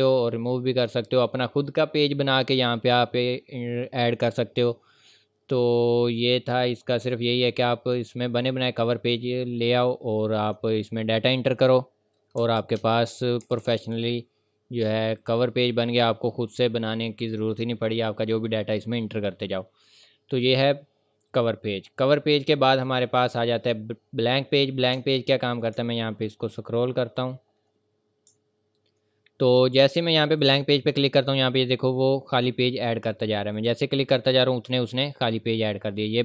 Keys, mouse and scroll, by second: 5.9 scroll up 1, 7.8-8.5 scroll down 1, 8.5 scroll up 1, 10.4 click, 12.4 KP_2, 14.3 scroll down 1, 15.2 click, 16.6 scroll down 1, 17.9-18.3 scroll up 1, 20.5 click, 20.9 scroll up 1, 21.0 scroll down 1, 22.8 click, 25.0-26.2 scroll down 3, 26.5 ctrl+scroll down 1, 27.0 ctrl+scroll up 1, 28.6 ctrl+scroll down 1, 30.4 click, 33.1 click, 34.1-34.4 scroll down 1, 34.7-35.1 scroll up 1.